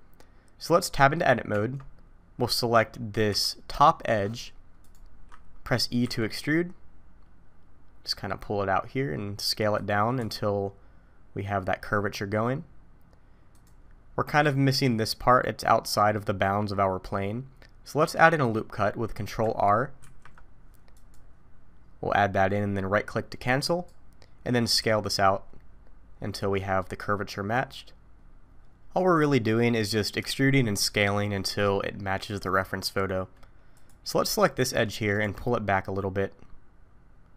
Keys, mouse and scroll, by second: 1.5 Tab, 3.3 2, 4.8 click, 6.0 e, 10.2 s, 13.8-16.8 scroll up 2, 16.8 scroll up 1, 20.0 ctrl+r, 24.8 s, 29.6-30.2 scroll down 2, 30.4 shift+middle click, 33.7 click, 35.2 g.